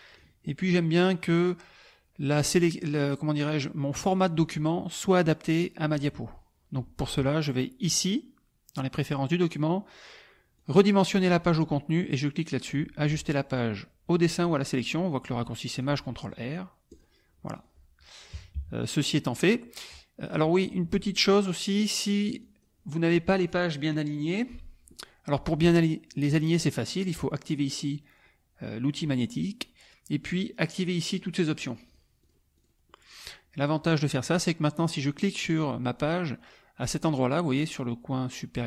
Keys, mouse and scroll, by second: 0.1 click, 0.4 middle click, 1.0 click, 2.2 middle click, 2.4 scroll up 1, 7.8 click, 10.7 click, 15.7 click, 16.9 click, 17.5 click, 18.5 KP_Subtract, 19.1 click, 19.2 middle click, 20.8 click, 21.4 click, 22.0 click, 22.4 click, 31.0 click, 31.5 click, 31.9 click, 32.2 click, 32.6 click, 33.8 middle click, 34.9 click.